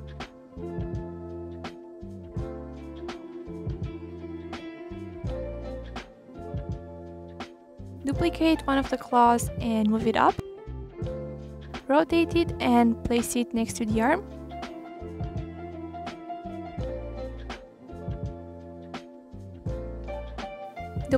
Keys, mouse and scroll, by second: 1.1 click, 1.6 g, 2.3 click, 3.0 click, 3.6 click, 3.8 g, 5.0 click, 5.8 r, 6.4 click, 6.5-7.1 scroll down 3, 6.6 middle click, 7.1 middle click, 7.5 ctrl+s, 7.6 click, 8.3 shift+d, 9.4 KP_7, 10.5 KP_3, 11.9 click, 12.4-12.9 middle drag, 12.9 click, 13.3 scroll up 2, 13.5 middle drag, 13.8 scroll down 2, 14.0-14.3 scroll up 1, 14.3 r, 15.9 click, 16.5-17.3 middle drag, 17.3 click, 17.7 middle click, 17.9 r, 18.4 click, 19.0 click, 19.6 shift+d, 19.7 click, 20.2 ctrl+z, 20.3 click, 20.7 e, 20.9 r.